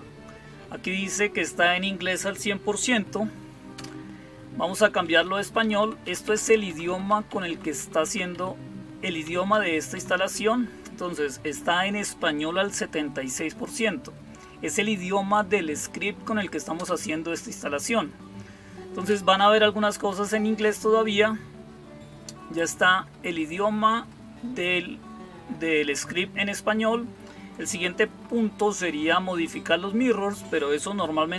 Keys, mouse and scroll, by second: 3.6 Return, 4.9 Down, 5.1 Down, 5.3 Down, 5.5 Down, 5.7 Down, 6.1 Down, 6.2 Down, 6.3 Down, 6.6 Down, 6.8 Down, 7.0 Down, 7.2 Down, 7.7 Down, 7.9 Down, 9.1 Down, 9.4 Down, 9.8 Down, 10.2 Up, 16.6 Return.